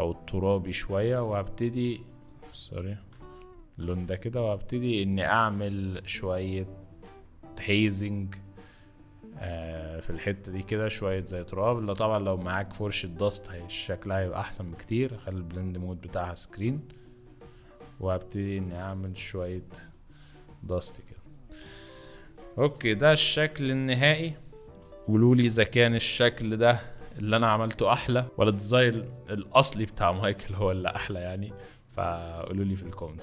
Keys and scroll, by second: 2.2 ctrl+z, 2.9 ctrl+z, 21.2 z, 26.4 ctrl+shift+t, 28.2 Return.